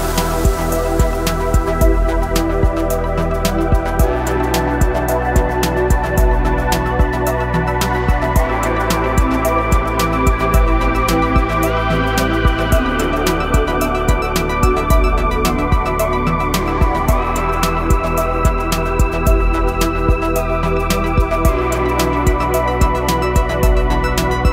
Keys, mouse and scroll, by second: 9.7 ctrl+shift+r, 10.9 ctrl+alt+shift+e, 11.7 click, 12.3 scroll up 1, 12.8-15.7 typing, 12.9 click, 13.4 scroll up 1, 14.3 click, 14.9 scroll down 1, 15.4 click, 16.5 click, 17.4-18.2 typing, 18.7-23.6 drag, 19.3 typing, 23.6 typing, 24.0-24.5 drag.